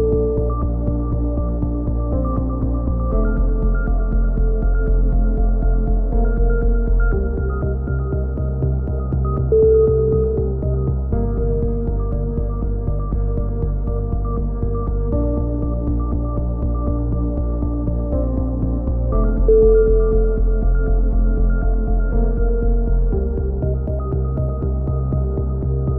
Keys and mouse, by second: 2.0 click, 2.6 middle click, 3.0 z, 3.5-4.5 drag, 4.6 middle click, 5.5 click, 10.2-11.9 middle drag, 13.1 e, 13.8-15.9 drag, 15.8 a, 15.9 right click, 16.8 right click, 18.8-20.0 right drag, 20.0 middle click, 20.4 click, 22.0 middle click, 22.5 click, 23.4 middle click, 23.5 click, 24.9 right click, 25.6 middle click.